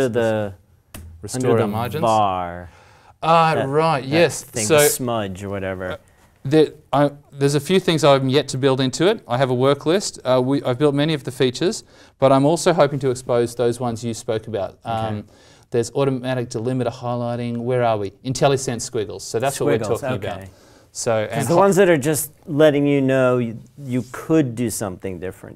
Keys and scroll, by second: 8.0 alt+Tab.